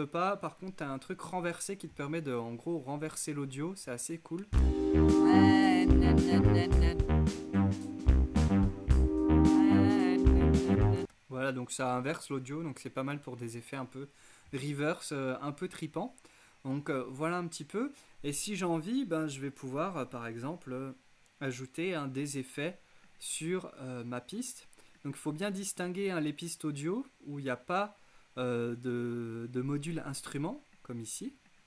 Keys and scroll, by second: 4.5 space, 11.0 space.